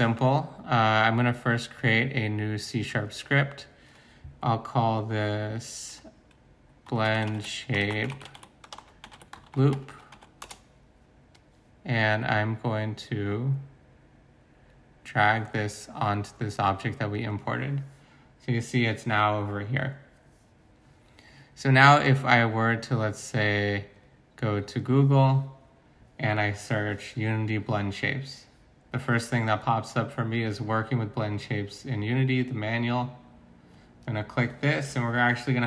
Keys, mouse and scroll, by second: 6.8-10.2 typing, 10.4 Return, 13.2-14.2 typing, 15.3 typing.